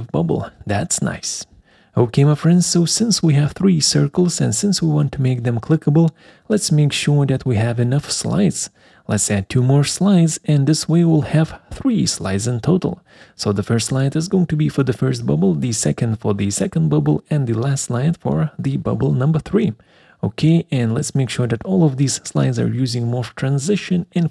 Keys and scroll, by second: 10.8 Return, 23.4-24.3 typing.